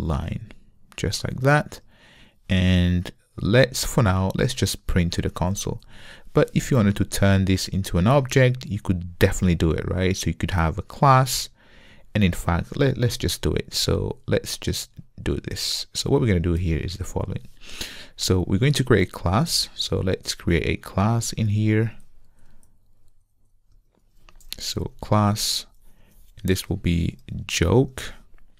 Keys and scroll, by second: 0.0 Return, 6.0 Return.